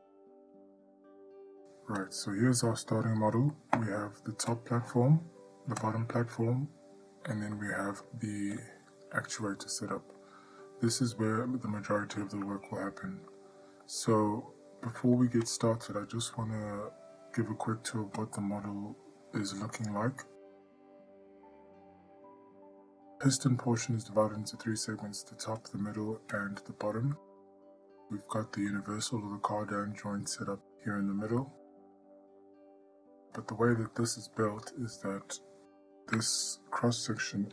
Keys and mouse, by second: 3.7 middle click, 7.8-8.3 middle drag, 8.8-9.5 drag, 10.2 middle drag, 12.7-13.5 ctrl+middle drag, 14.3-15.2 ctrl+middle drag, 15.7-16.1 shift+middle drag, 16.6-17.1 middle drag, 18.4 click, 19.9 middle drag, 22.2-22.6 ctrl+middle drag, 23.0-23.4 shift+middle drag, 24.1-24.4 ctrl+middle drag, 25.8 click, 26.6 click, 27.4-27.9 ctrl+middle drag, 28.1-28.9 middle drag, 29.3-30.2 ctrl+middle drag, 30.6-31.0 middle drag, 31.4 middle drag, 32.5-32.8 ctrl+middle drag, 33.1 click, 33.5-33.9 middle drag, 34.1-34.6 ctrl+middle drag, 34.8-35.5 middle drag.